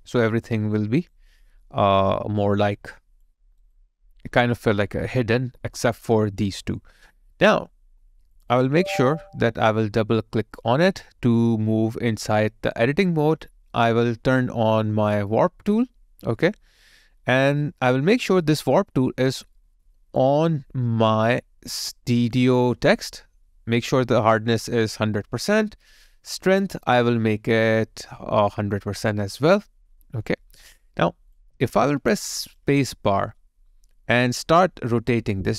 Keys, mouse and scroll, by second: 0.8 alt+right click, 1.3 alt+middle click, 1.8 alt+click, 3.4 alt+right click, 3.7 alt+click, 4.3 alt+right click, 8.5 double click, 11.5 alt+right click, 20.4 alt+click, 31.4 alt+click, 33.4 space.